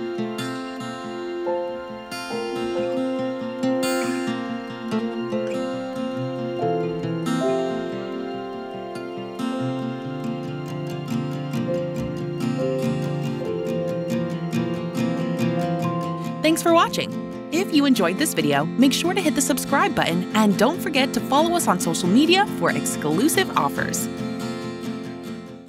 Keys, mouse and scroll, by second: 0.8 s, 1.6 w, 2.1 w, 6.0-6.7 typing, 10.4-15.5 typing.